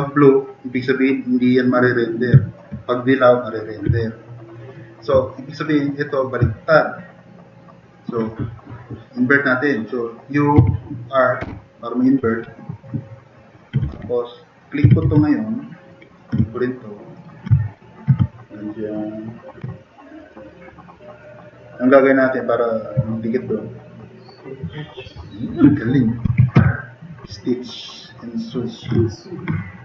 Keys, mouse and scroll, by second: 2.4 drag, 4.2 click, 5.7 click, 6.9 drag, 7.1 click, 7.9 click, 10.5 u, 11.4 r, 12.4-13.1 drag, 13.6-15.6 typing, 19.7-20.2 drag, 20.7-21.4 typing, 20.9 click, 26.2 m, 26.7 p, 28.0 drag, 28.4 drag, 29.7-29.8 drag.